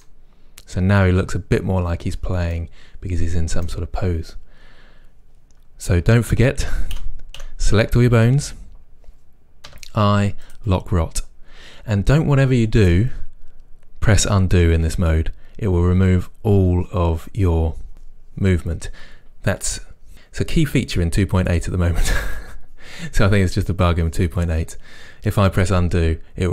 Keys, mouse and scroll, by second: 6.7 a, 9.7 i, 10.6 i, 13.8-26.5 middle drag.